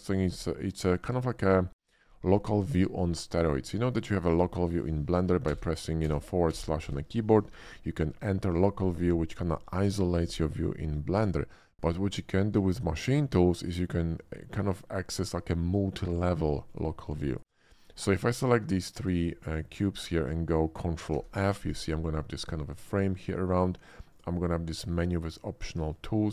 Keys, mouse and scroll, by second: 0.2 shift+d, 0.6 click, 1.7 shift+d, 2.6 click, 3.1 shift+middle click, 3.8 shift+middle click, 4.3 shift+click, 5.4 /, 6.0 middle click, 6.2 /, 6.7 /, 6.8 middle click, 12.3 shift+middle click, 13.6 shift+middle click, 14.2 shift+middle click, 14.6 shift+middle click, 16.6 shift+click, 17.3 ctrl+click, 17.7 ctrl+click, 18.2 shift+middle click, 19.1 shift+click, 19.5 shift+click, 21.1 ctrl+f, 24.1 click, 24.9 click, 26.2 shift+middle click.